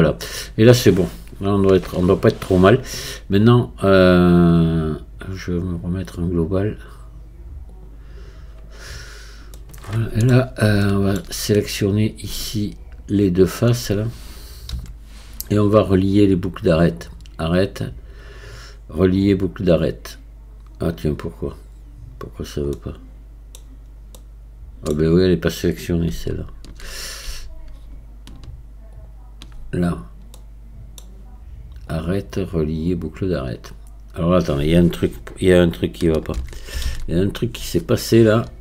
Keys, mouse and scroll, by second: 3.6-5.4 scroll down 1, 5.4-5.8 scroll down 1, 5.8-9.6 drag, 9.6 middle click, 10.4-10.7 scroll down 3, 10.9 middle click, 11.6 scroll up 1, 11.6-12.8 middle drag, 17.4-20.4 drag, 22.3-22.8 scroll up 2, 22.8 middle click, 23.6-24.2 scroll down 2, 24.2-26.3 middle drag, 26.3-30.0 shift+drag, 30.0 scroll down 2, 30.4-31.9 middle drag, 31.9-36.4 drag, 36.4 ctrl+z, 38.5-38.6 scroll up 1.